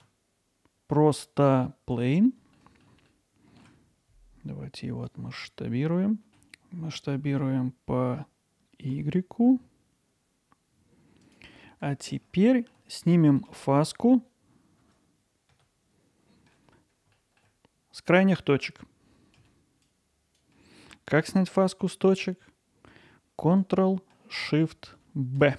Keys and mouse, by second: 2.6 middle drag, 3.1-3.6 ctrl+alt+middle drag, 5.1-6.3 drag, 6.3 Tab, 11.2 click, 11.7 middle click, 12.4 alt+middle click, 13.0 ctrl+alt+middle click, 17.3 middle click, 19.9 click, 25.4 ctrl+shift+b.